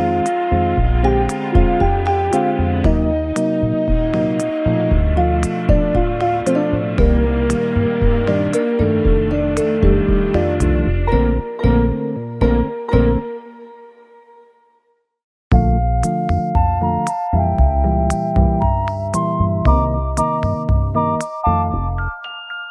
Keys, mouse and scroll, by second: 1.0-1.8 scroll down 4, 1.4 middle click, 4.4 scroll down 1, 4.7 KP_0, 6.7 KP_0, 8.1 Delete, 9.4 KP_0, 14.0 shift+a, 14.0 shift+a, 18.6-19.3 scroll down 1, 19.7-20.7 scroll up 5, 21.0 scroll down 2, 22.3 r.